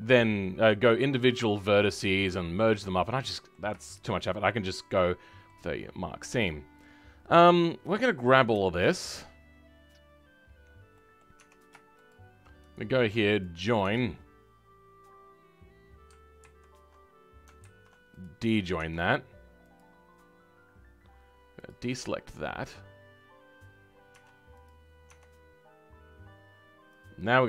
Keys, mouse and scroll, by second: 1.5-2.6 drag, 2.6-3.0 scroll down 2, 3.0-4.2 middle drag, 4.2-4.9 scroll up 2, 4.9-8.3 middle drag, 8.3 click, 10.6 scroll down 4, 10.9 middle click, 11.3 Tab, 12.0 shift+click, 13.4 right click, 13.8 Tab, 17.6 ctrl+z, 18.2 click, 22.6 click, 24.1 Tab.